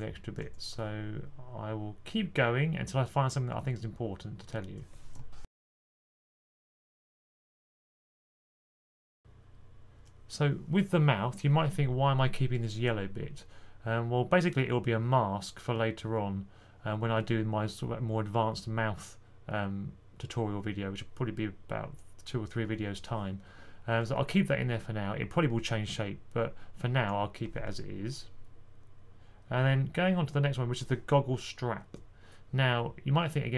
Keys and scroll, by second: 0.0-0.3 typing, 6.3 z, 6.9 z.